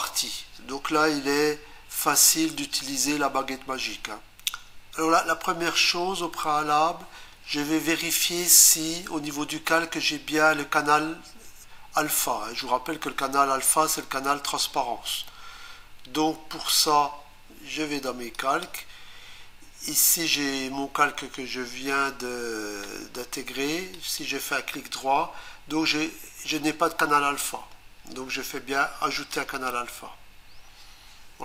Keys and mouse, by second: 18.3 click, 29.3 click.